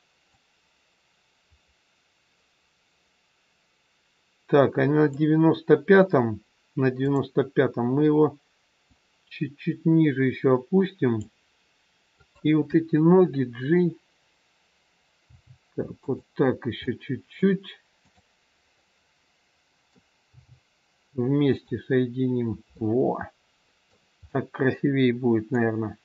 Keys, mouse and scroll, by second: 0.2 click, 7.0 click, 8.8 click, 12.2 click, 15.2 g, 16.7 middle click, 17.9 click, 18.8 middle click, 20.2 g, 22.8 middle click.